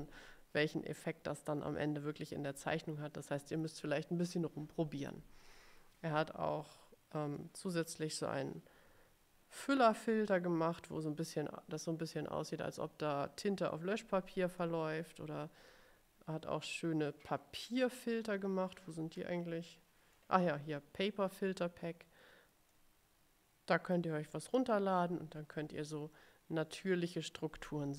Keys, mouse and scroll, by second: 7.6 click, 14.7-20.4 drag, 22.8-25.3 drag.